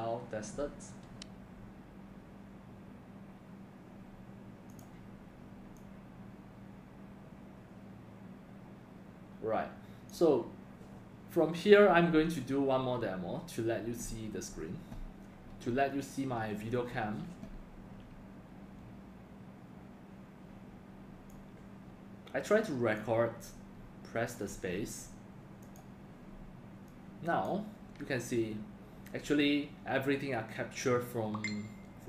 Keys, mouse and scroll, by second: 4.7 click, 5.8 drag, 24.5 space.